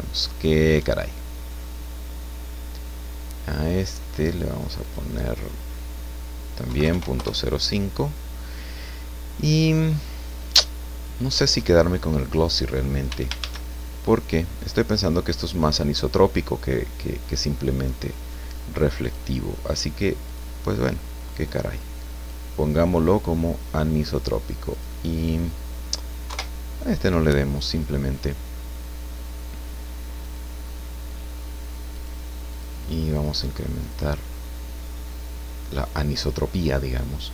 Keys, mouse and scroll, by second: 1.3-2.5 scroll up 2, 4.2 click, 4.8 click, 6.7 KP_Decimal, 6.8 KP_0, 7.2 KP_Enter, 10.4 click, 13.1 x, 19.0 click, 20.3 click, 21.3-22.5 drag, 23.6 middle click, 24.7 click, 26.3 KP_0, 30.2 click, 31.1 click, 31.9 click, 32.5 click, 33.1 click, 33.9 click, 35.8 click.